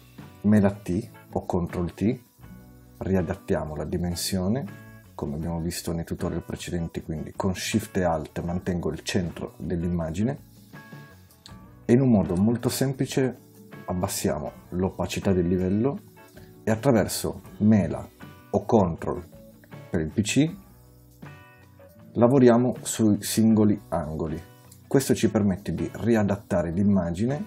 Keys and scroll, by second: 0.4 super+t.